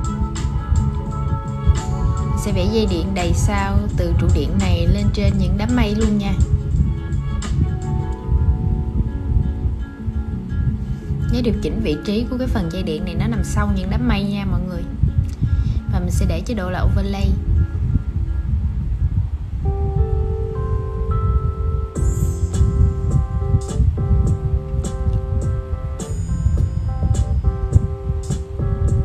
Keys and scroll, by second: 8.5 super+}.